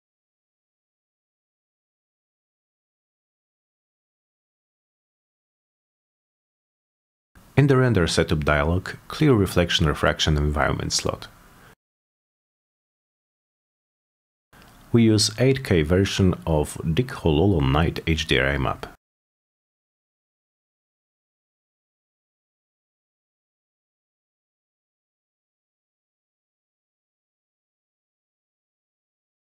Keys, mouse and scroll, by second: 0.2 Return, 0.8 click, 2.5 click, 6.0 click, 6.2 F10, 8.0 click, 8.8 right click, 9.5 click, 10.3 click, 11.2 click, 12.3 click, 12.4 click, 14.3 click, 14.9 click, 15.3 click, 16.0 click, 16.6 click, 17.0 click, 17.7 middle click, 19.0 click, 19.7 click, 20.0 click, 21.0 click, 21.4 click, 22.2 click, 23.0 click, 24.9-25.3 drag.